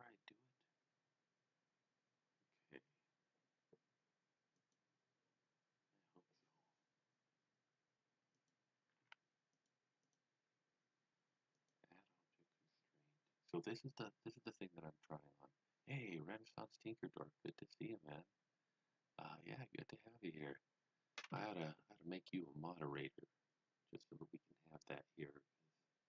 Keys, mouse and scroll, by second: 4.5 click, 8.3 click, 8.7-9.6 typing, 9.5 click, 10.0 click.